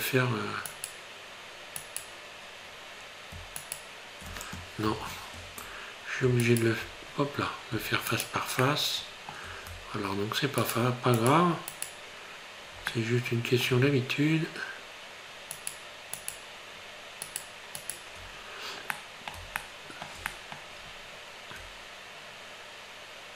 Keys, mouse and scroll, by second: 0.7 shift+right click, 1.8 shift+right click, 3.7 alt+shift+right click, 4.9 ctrl+z.